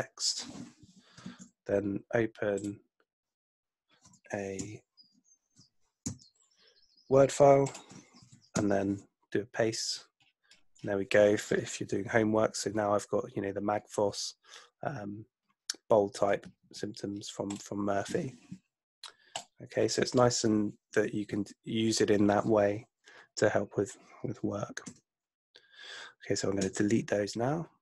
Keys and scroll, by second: 1.3 super+Tab, 4.6 super+n, 6.0 super+n, 8.8 alt+shift+super+v, 24.9 BackSpace, 26.6 Return.